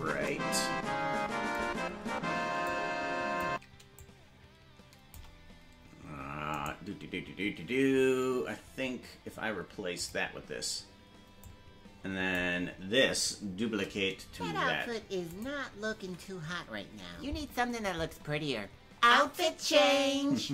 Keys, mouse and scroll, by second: 2.6 click, 3.2 click, 6.5-7.7 right drag, 8.4 g, 11.4-12.3 drag, 13.6 shift+d.